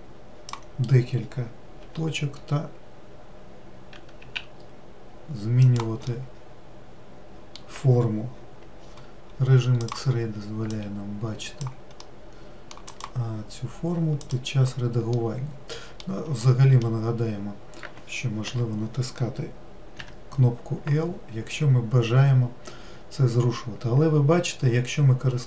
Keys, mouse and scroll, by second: 2.3 g, 6.6-9.6 middle drag, 10.3 click, 12.5 middle click, 13.4 click, 14.7 click, 15.6-19.0 middle drag, 19.0 l, 20.5 g.